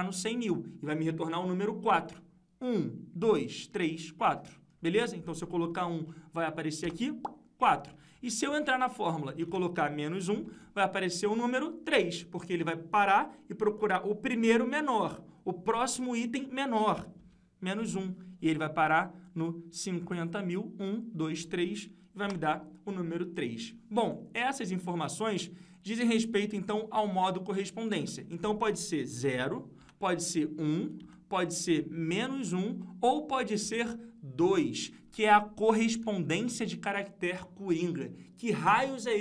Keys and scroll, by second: 8.4 F2, 24.5 F2.